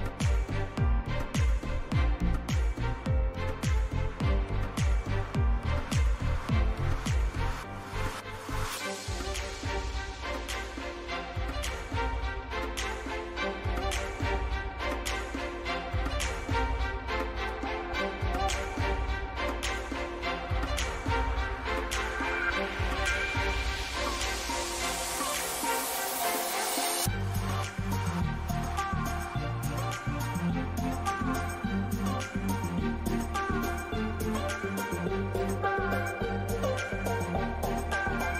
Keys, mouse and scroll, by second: 2.2-3.5 middle drag, 3.0 a, 5.3 z.